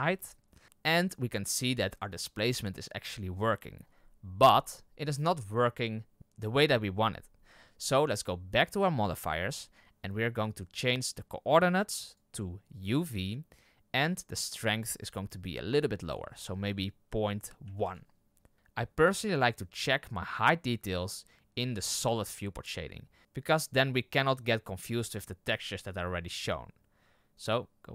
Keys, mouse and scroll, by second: 12.8-18.5 drag, 21.8 click, 27.3 click.